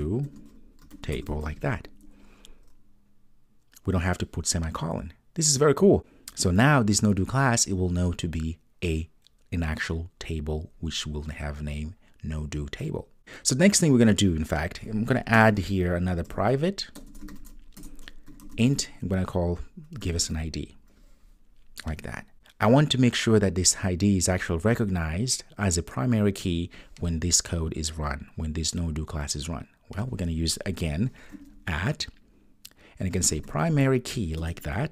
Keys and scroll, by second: 17.8 Return, 34.4 Return.